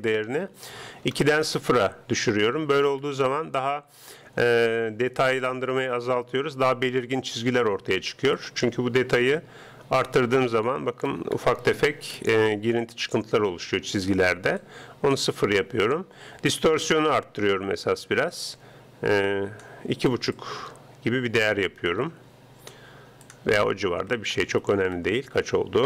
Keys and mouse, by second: 0.0-1.7 drag, 3.0-4.8 middle drag, 8.4-10.0 drag, 11.2-14.4 middle drag, 14.6-16.4 drag, 18.3-20.0 drag, 20.4-22.1 drag, 23.3-25.0 drag.